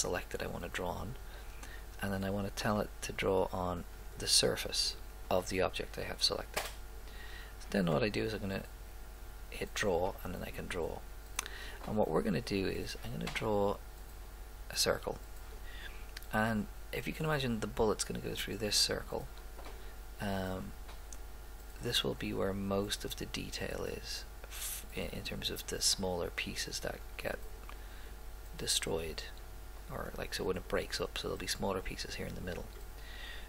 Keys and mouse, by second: 4.0-5.5 drag, 10.4 middle click, 10.9 middle click, 12.4-14.4 drag, 19.6-21.5 drag, 27.3 click.